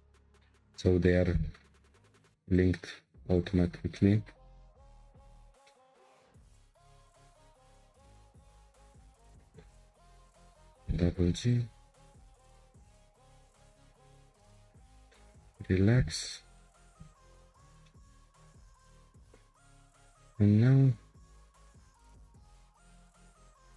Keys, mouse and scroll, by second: 0.0 click, 0.7 click, 1.4 g, 3.3 click, 4.0 middle click, 4.7 g, 6.9 click, 7.3 g, 10.2 click, 11.0 2, 11.5 click, 12.4 ctrl+click, 15.1-16.1 middle drag, 16.1 Tab, 16.8 click, 17.3 Tab, 17.8-20.8 shift+middle drag, 20.8-21.2 scroll up 1, 21.2 click, 22.2 3, 22.9 click, 23.7 ctrl+click.